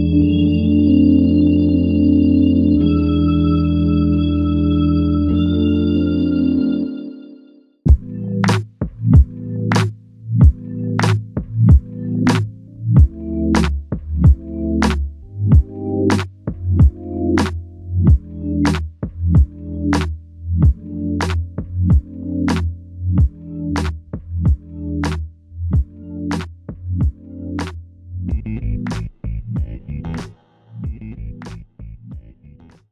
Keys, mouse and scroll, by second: 0.1 ctrl+click, 4.9 shift+click, 9.8 alt+click, 11.2 alt+shift+click, 12.8 alt+click, 13.0 ctrl+alt+click, 15.5 f, 26.4 typing, 26.6 ctrl+alt+click, 27.6 alt+click, 30.1 alt+click.